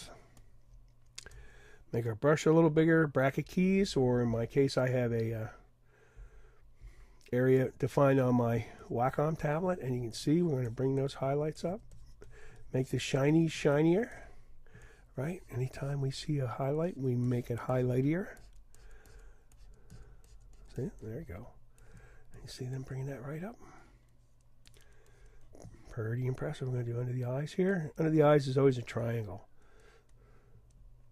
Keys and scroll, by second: 3.0 [, 4.2 [, 4.6 ], 6.2 ].